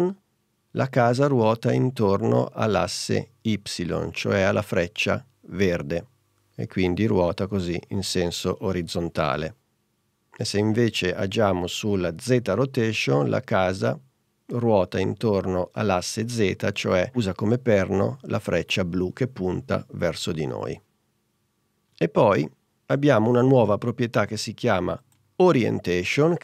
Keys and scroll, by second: 9.9 super+z, 20.8 super+z.